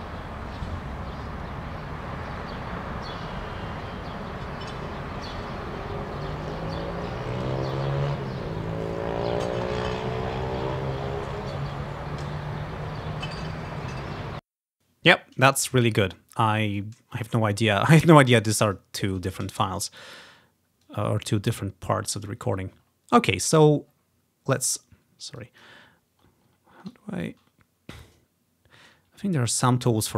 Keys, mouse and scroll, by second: 14.3 space, 16.2-17.9 ctrl+scroll down 3, 18.8 click, 19.7 click, 20.6-22.3 drag, 22.6-23.7 ctrl+scroll up 1, 22.8 click, 23.7-24.3 scroll down 3, 24.3 scroll up 1, 25.5-27.0 drag, 27.5 scroll up 2, 28.5 scroll down 2.